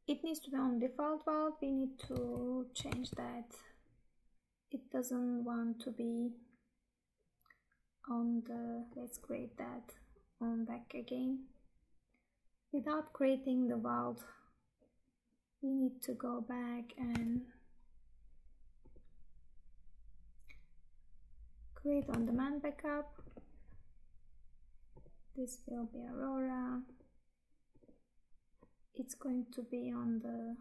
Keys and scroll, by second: 2.2 Tab, 17.3 Tab, 22.2 Tab.